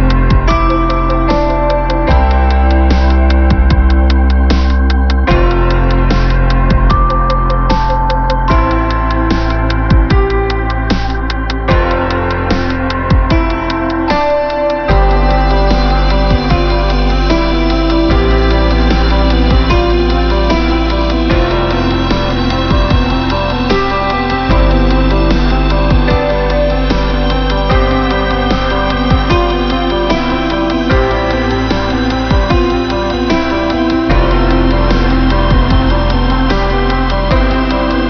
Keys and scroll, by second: 11.4 ctrl+-, 12.1 ctrl+=, 14.6 b, 15.9 space, 24.2 ctrl+alt+shift+n.